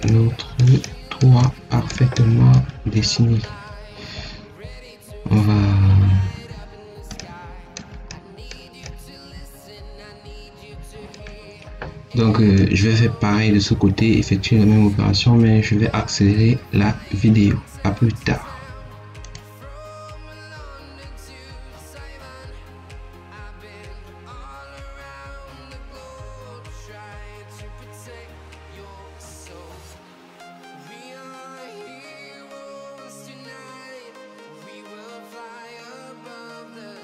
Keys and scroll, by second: 26.8 ctrl+s, 28.8 t, 32.9 0, 33.0 ., 33.0 0, 33.5 Return, 33.9 0, 34.1 Return, 35.8 0, 36.1 Return.